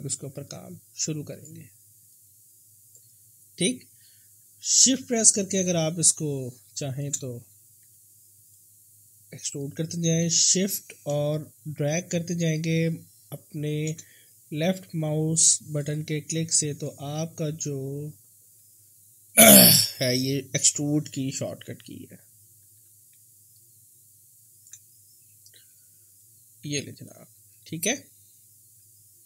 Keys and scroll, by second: 7.8 r, 10.2 w, 14.9 r, 21.0 e, 22.7 w, 25.6 r.